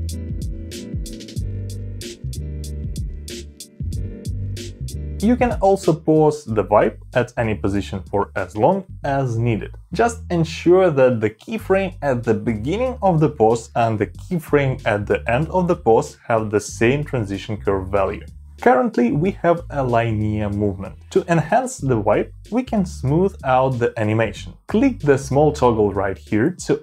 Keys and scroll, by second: 1.5 space, 4.4 space, 15.5 [, 16.9 ], 18.5 [.